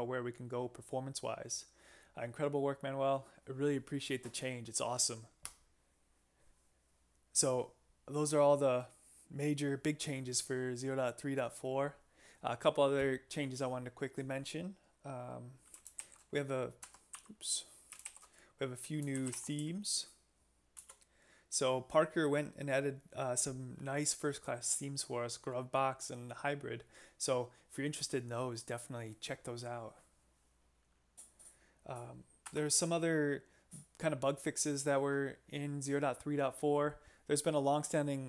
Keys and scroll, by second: 16.0 alt+shift+p, 16.8 Escape, 17.1 u, 18.1 alt+shift+p, 18.9 alt+shift+p, 18.9-20.1 typing, 20.8 Return, 32.4 Escape.